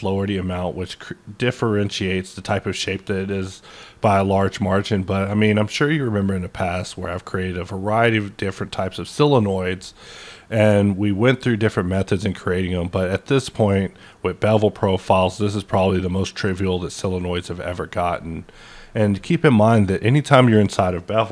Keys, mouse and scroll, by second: 6.0 typing, 16.1 typing.